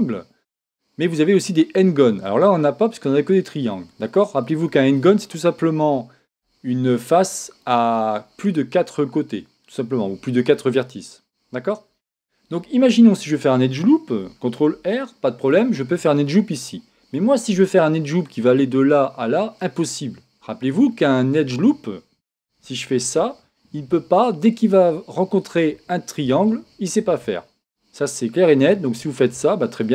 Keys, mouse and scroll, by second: 3.7-5.4 middle drag, 12.9-14.7 middle drag, 14.7 ctrl+r, 16.6 click, 17.1-19.6 middle drag, 20.9-22.7 middle drag, 23.0 ctrl+r, 29.4 click, 29.8-29.9 middle drag.